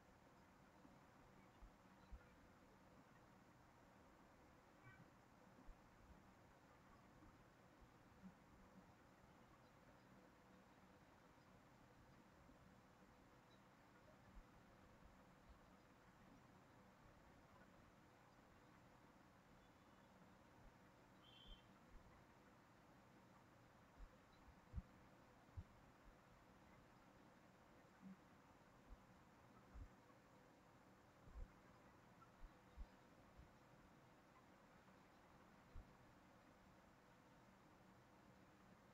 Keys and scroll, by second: 2.5 ctrl+z, 8.1 ctrl+c, 8.4 ctrl+v.